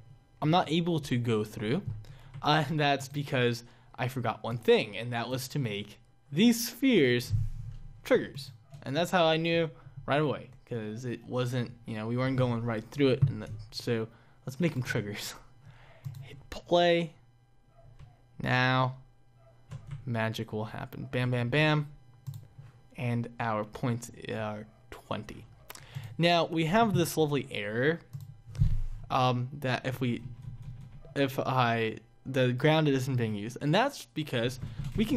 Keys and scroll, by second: 0.2 Up, 0.9 Down, 1.4 Up, 2.2 Down, 2.7 Up, 18.3 Left, 20.3 Up, 24.8 Down.